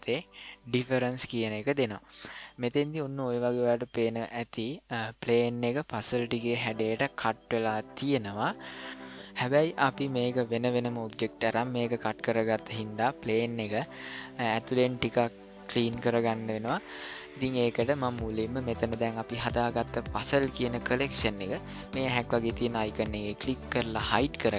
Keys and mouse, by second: 0.8 click, 23.3 click.